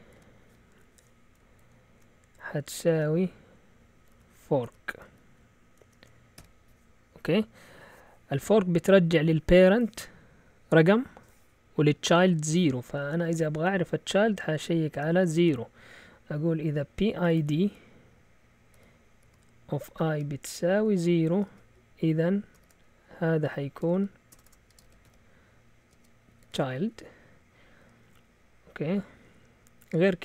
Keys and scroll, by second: 0.1 typing, 1.4-6.3 typing, 13.2 Return, 14.5-15.8 typing, 16.8-27.4 typing.